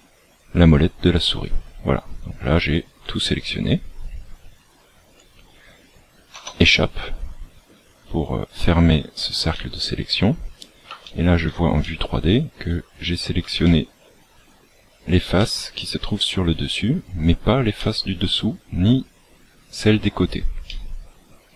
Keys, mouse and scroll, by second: 11.0 shift+middle click, 11.7 middle click, 13.6 shift+middle click, 14.3 scroll up 4, 15.3 middle click, 17.7 middle click, 20.6 middle click.